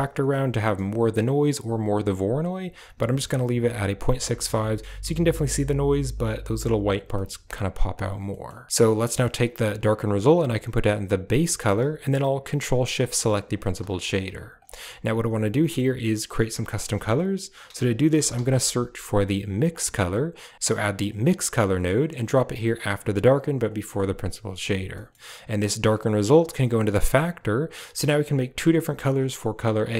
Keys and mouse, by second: 4.3 shift+middle drag, 7.1 shift+click, 8.2 click, 9.8 click, 9.9-11.2 drag, 12.6 ctrl+shift+click, 13.0 click, 13.8 click, 14.5 g, 15.5 click, 16.6 shift+a, 20.5 typing, 22.9 click, 23.6 drag, 24.8 middle click, 26.3-26.9 drag.